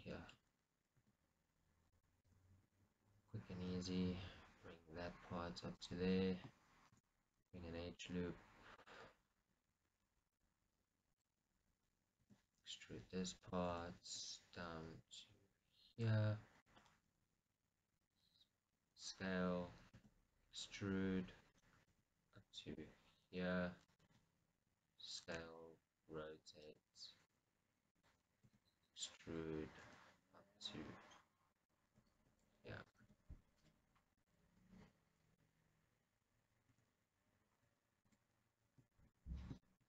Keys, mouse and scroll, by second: 0.4-2.4 shift+middle drag, 1.4 e, 2.4 right click, 2.6 g, 6.1 click, 9.0 click, 11.3 click, 12.7 e, 13.8 right click, 14.0 g, 16.3 click, 17.2 s, 18.3 click, 20.3 e, 22.0 right click, 22.3 g, 24.2 click, 24.5 s, 25.5 click, 25.8 r, 26.9 click, 27.5 g, 28.3 click, 28.8 e, 29.6 right click, 30.2 g, 32.0 click, 32.4 r, 33.3 click, 33.5 s, 34.5 click, 37.1 Tab, 37.4 scroll down 2, 38.6-39.1 scroll down 2, 39.1-39.8 shift+middle drag.